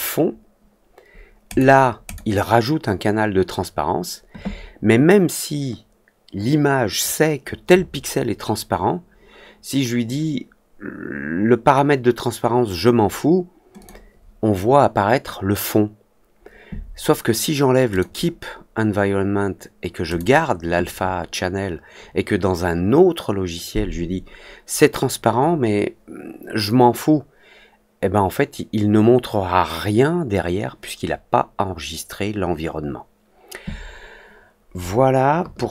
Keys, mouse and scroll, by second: 1.4 click, 2.0 click, 13.7 click, 17.8 click, 20.0 click.